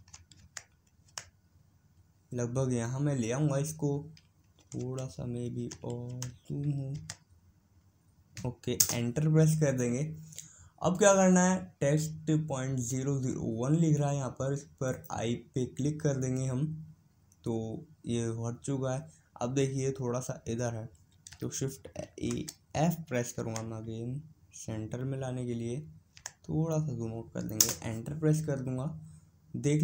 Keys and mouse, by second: 15.4-17.2 drag.